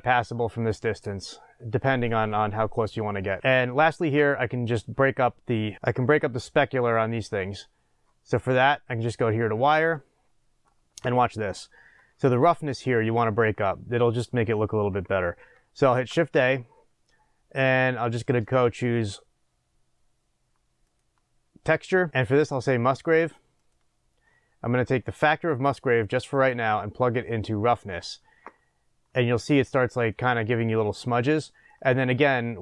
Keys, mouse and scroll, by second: 0.1-9.0 middle drag, 3.4 scroll up 1, 9.0 click, 24.9-28.2 middle drag, 28.2 click, 29.4-30.2 scroll up 1, 30.2-32.6 middle drag.